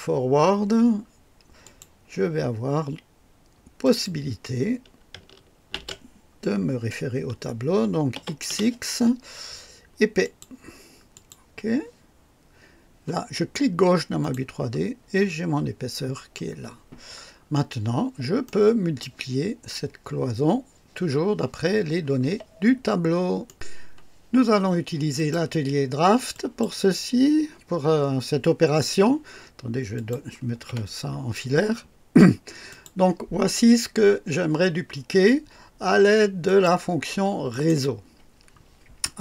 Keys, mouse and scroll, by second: 1.6 click, 3.8 click, 5.7 ctrl+v, 8.1 x, 8.5 x, 10.2 click, 11.1 click, 14.2 click, 15.2-15.6 scroll up 1, 16.5-16.8 scroll down 1, 17.3 scroll down 1, 18.4 right click, 23.5 right click, 25.2 click, 26.3 click, 30.0 click, 30.7 &, 32.7 click, 36.5 click, 37.5 click.